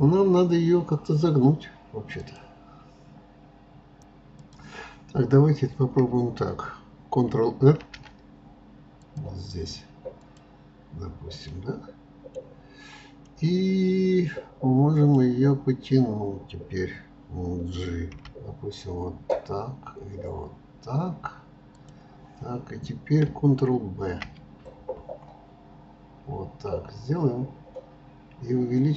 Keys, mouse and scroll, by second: 11.0-15.9 middle drag.